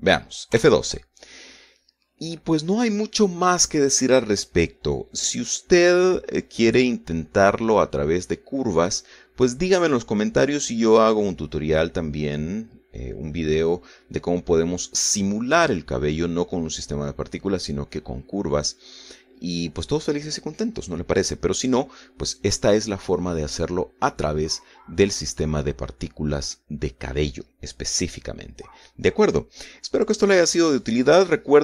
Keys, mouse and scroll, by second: 1.7 F12.